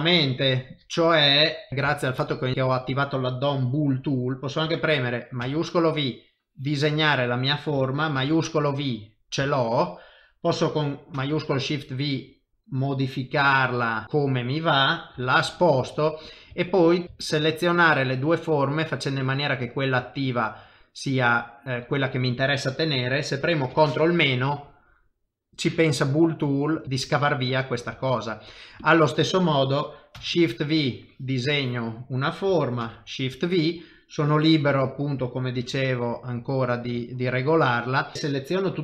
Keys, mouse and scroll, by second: 0.8 middle click, 1.7 KP_7, 1.7 shift+middle click, 1.9 shift+middle click, 2.5 shift+middle click, 6.0 click, 8.3 shift+v, 8.7 middle click, 9.5 shift+middle click, 11.1 shift+v, 14.0 middle click, 15.2 g, 16.2 click, 16.7 shift+click, 17.0 click, 17.2 shift+click, 17.7 middle click, 21.3 middle click, 23.9 ctrl+KP_Subtract, 24.9 middle click, 28.0 shift+middle click, 28.2 shift+middle click, 28.8 click, 29.1 middle click, 30.2 shift+v, 30.8 click, 32.9 shift+v, 33.1 middle click, 35.6 ctrl+shift+v, 36.4 middle click, 37.1 shift+middle click, 37.6 middle click, 38.1 shift+click.